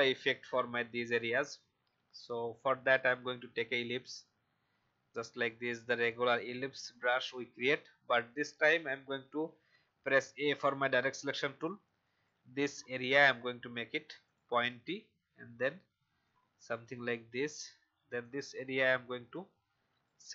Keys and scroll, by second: 9.3 a.